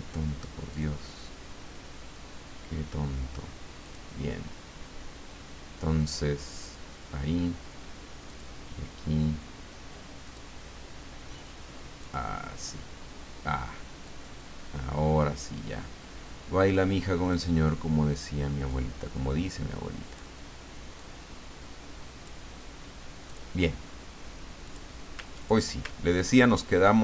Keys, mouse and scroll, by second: 0.7 click, 3.8 click, 6.6 click, 8.3 click, 10.2 click, 12.0 click, 14.0-17.6 drag, 18.7-20.7 drag, 20.9-22.5 drag, 23.3 click, 24.6 click, 25.4 ctrl+click, 26.0-26.7 ctrl+scroll down 2.